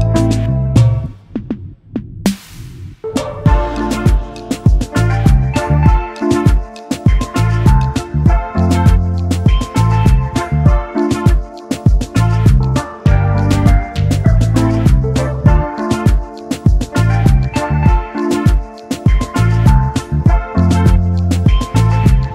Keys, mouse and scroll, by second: 1.8 right click, 5.1 alt+shift+click, 5.8 alt+scroll up 1, 6.8 right click, 8.2 double click, 9.7 Delete, 11.2 Delete, 13.6 shift+click, 15.4 ctrl+3, 16.0 space, 20.6 shift+m, 21.8 alt+click.